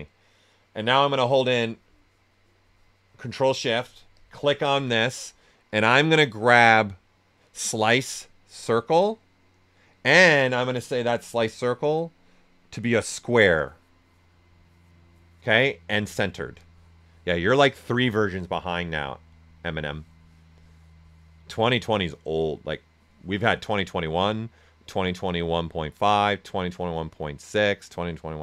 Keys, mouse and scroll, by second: 4.1 ctrl+shift+click, 8.6 ctrl+shift+click, 12.7 ctrl+shift+click.